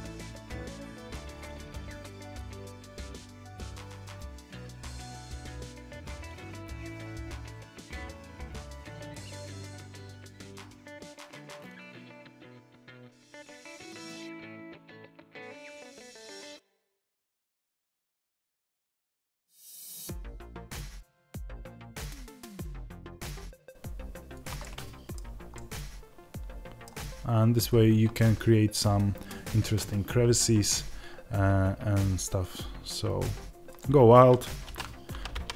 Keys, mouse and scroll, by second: 1.1 KP_0, 6.2-6.6 scroll up 1, 6.6 g, 7.4 g, 7.7 click, 8.0-9.8 middle drag, 8.3 alt+d, 9.8 click, 10.1 alt+d, 10.8 click, 11.1 KP_0, 11.9 click, 12.4-17.2 middle drag, 12.6 scroll up 1, 15.1 scroll down 1, 17.0 scroll up 2, 17.2 click, 17.4 x, 17.5-17.9 scroll down 2, 17.9 click, 19.6-20.8 middle drag, 20.3 r, 20.8 click, 20.9 middle click, 21.2 scroll down 1, 21.5 alt+d, 21.9 click, 24.3 click, 24.5-33.7 middle drag, 25.1 scroll down 1, 26.8-32.1 scroll down 1, 33.7 click.